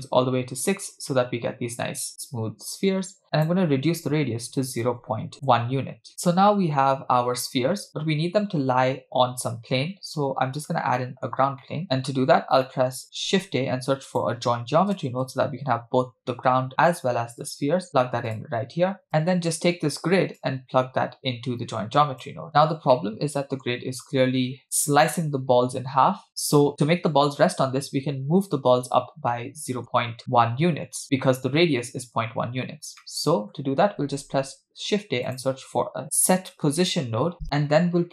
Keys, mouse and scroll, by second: 3.3-5.5 drag, 6.1-7.2 middle drag, 7.4-8.1 scroll up 3, 8.1-9.0 scroll down 2, 10.4 scroll down 2, 11.0 middle click, 11.6 middle click, 12.4 scroll down 1, 12.6 middle click, 13.1 shift+a, 20.4 click, 20.6-22.3 drag, 23.0-23.8 middle drag, 29.3 middle click, 30.2-30.8 scroll up 4, 33.2-33.7 middle drag, 34.1 shift+a.